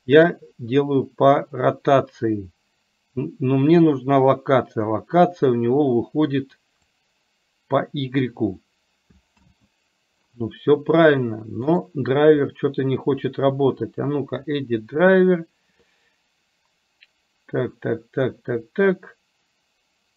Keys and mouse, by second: 7.1-8.4 drag, 9.4 ctrl+z, 12.4-20.1 right drag.